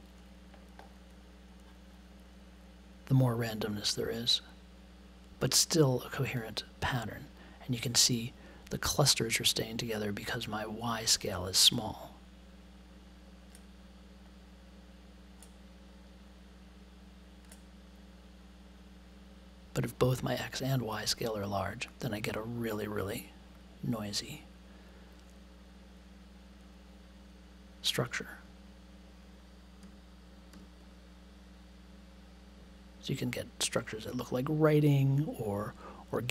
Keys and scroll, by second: 29.8 1.